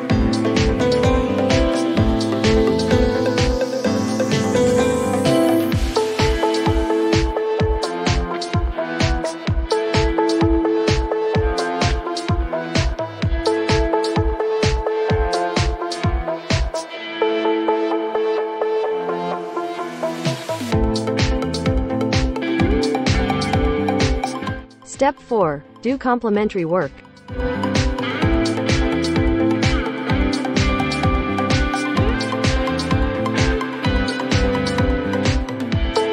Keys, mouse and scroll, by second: 0.8 click, 1.7-2.7 typing, 2.9 Return, 5.2-8.9 drag, 10.0 click, 11.7 right click, 13.1 click, 14.1-15.8 typing, 17.7 click, 18.4 click, 21.3 click, 27.7 click, 28.1 right click, 30.6 click, 35.2 click.